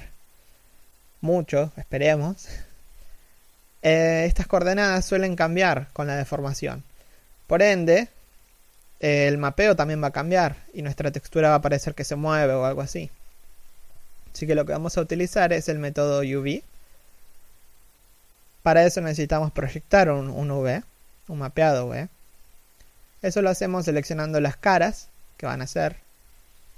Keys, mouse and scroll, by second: 14.1-15.1 scroll up 1, 15.1 Tab, 15.4 a, 15.6 middle click, 16.1-17.1 scroll up 1, 17.1 l, 18.9 g, 20.9 middle click, 21.5 alt+right click, 23.1 l, 23.5 scroll up 1, 23.6 a, 24.6 alt+right click, 26.1 ctrl+=.